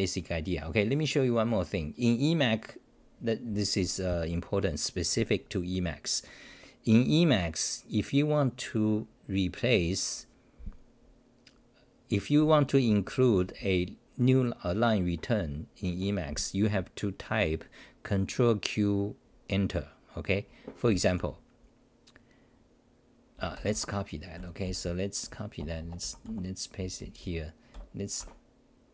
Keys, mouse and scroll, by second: 12.9 ctrl+r, 12.9-14.1 typing, 23.3-26.8 typing, 25.6 Return, 28.2 Home, 28.7-28.9 typing.